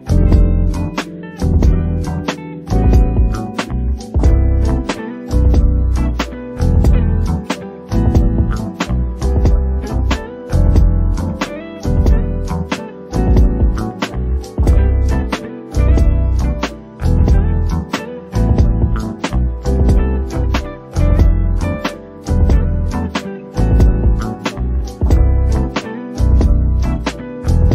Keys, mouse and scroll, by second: 0.1 shift+middle click, 0.5 click, 1.1 scroll down 2, 1.2 shift+middle click, 1.5 click, 1.7 click, 2.4 click, 2.5 scroll down 4, 2.7 shift+middle click, 3.1 click, 3.9 click, 4.1 click, 4.6 click, 4.8 click, 5.5 scroll up 2, 5.6 shift+middle click, 6.0 click, 6.2 shift+click, 6.4 s, 7.2 click, 7.4 shift+click, 7.5 s, 8.1-8.5 scroll down 5, 8.5 shift+middle click, 9.2 alt+click, 9.4 middle click, 10.2 e, 11.0 middle click, 11.3 click, 11.5 middle click, 12.2 s, 13.1 click, 13.5 s, 15.5-16.6 middle drag, 16.6 click, 16.9 middle click, 17.7 KP_3, 17.9 z, 18.4-19.0 scroll up 2, 19.0 click, 19.7-20.3 scroll up 5, 20.3 alt+a, 20.6 c, 23.5 click, 24.8 click, 25.6 click, 26.0-27.7 typing, 26.6 click, 27.6 click.